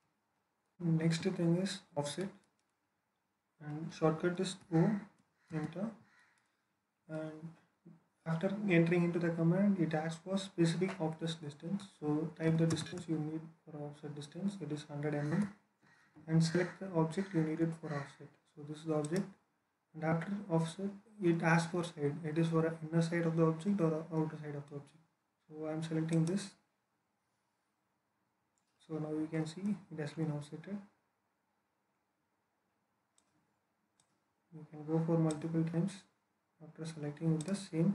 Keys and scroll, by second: 0.9 alt+Escape, 4.5-5.4 typing, 12.4-12.8 typing, 15.2 Return.